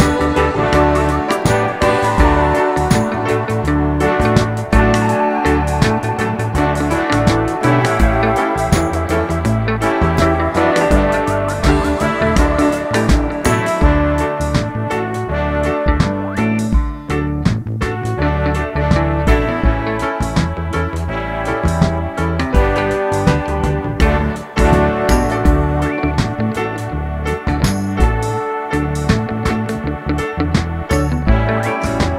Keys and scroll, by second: 27.1 Tab, 27.3 Tab, 27.5 Tab, 27.7 Tab, 28.2 Tab.